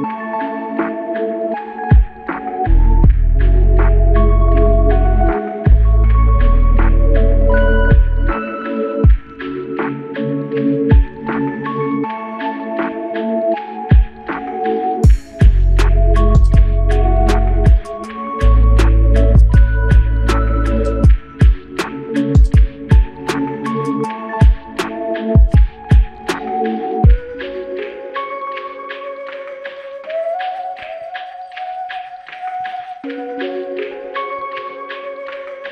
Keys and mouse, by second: 4.1 shift+click, 8.9 alt+click, 10.5 alt+click, 11.4 alt+click, 11.5 ctrl+alt+click, 12.9 alt+click, 14.5 double click, 16.3 alt+click, 17.6 double click, 18.3 alt+click, 19.7 typing, 21.0 alt+shift+click, 22.1 double click, 22.9 shift+click, 24.8 alt+click, 26.5 shift+click, 27.7 double click, 28.1 shift+click, 32.9 f, 34.7 alt+click.